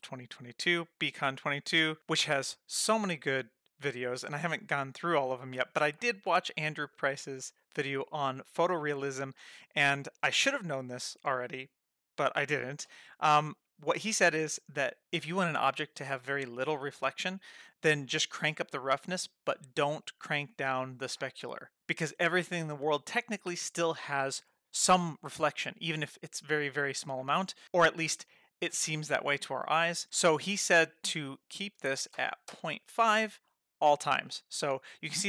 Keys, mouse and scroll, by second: 30.9-34.0 drag.